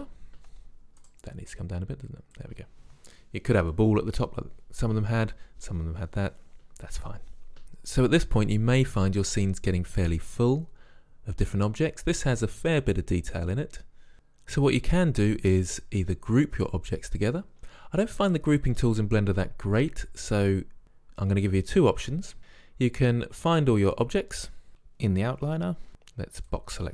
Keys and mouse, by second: 0.9 right click, 1.7-3.0 middle drag, 3.0 click, 22.4-24.4 drag, 25.6 a, 25.9 b.